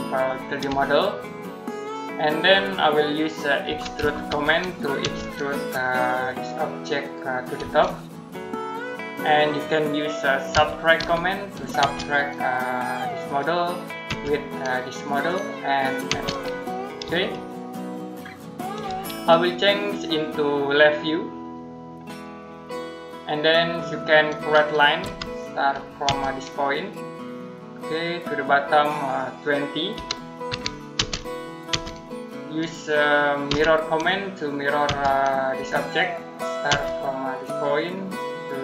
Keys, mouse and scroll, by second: 0.7 shift+middle click, 3.3-4.9 typing, 6.8 click, 7.4 space, 8.6 click, 9.2 middle click, 10.4-11.6 typing, 12.3 click, 13.9 space, 14.9 click, 15.9 space, 17.1 middle click, 20.4 click, 23.3-23.6 scroll down 1, 23.6 middle click, 24.9 l, 25.9 space, 27.6 click, 29.8-30.8 typing, 34.7 space, 35.4 click, 36.5 space, 37.8 click.